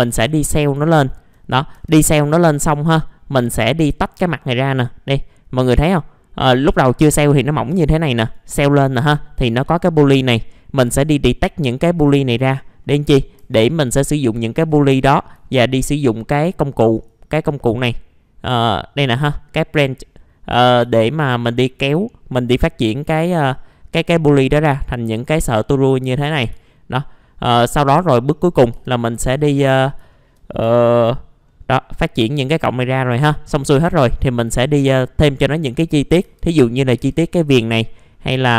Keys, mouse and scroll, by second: 0.1 click, 0.6 scroll down 1, 0.9 alt+middle click, 1.6-3.5 scroll up 2, 1.7 F4, 3.5 scroll down 1, 4.2-5.1 scroll up 1, 6.6-9.3 drag, 10.9-12.7 scroll down 1, 12.8 middle click, 12.9-13.2 scroll down 1, 13.4 F4, 13.6 middle click, 13.8-14.6 scroll down 1, 14.6 click, 15.4 alt+middle click, 16.9 click, 20.5 scroll up 1, 20.9 alt+middle click, 23.8-26.1 scroll down 1, 26.1 middle click, 26.6 alt+middle click, 27.8-28.7 scroll up 1, 28.7 F4, 29.2 click, 29.7 scroll down 1, 30.1 alt+middle click, 30.6 F4, 31.5 middle click, 31.6 scroll down 1, 32.9 middle click, 33.9-34.6 scroll up 1, 34.6 middle click, 35.7-36.2 scroll up 1, 36.2 F4, 37.4-37.9 scroll down 1, 37.9 middle click.